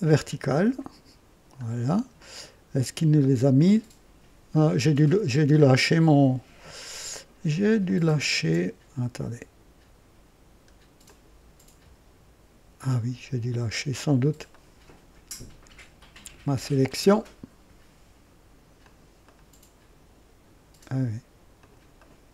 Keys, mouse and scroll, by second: 0.4 click, 1.6-2.1 scroll down 2, 2.5 scroll down 1, 3.6-4.7 right drag, 5.0-5.7 scroll up 3, 7.8 click, 11.0 click, 14.5-15.2 ctrl+right drag, 16.8 click, 18.8 click, 19.2-20.6 ctrl+right drag, 21.6 ctrl+click, 21.9-22.3 ctrl+right drag.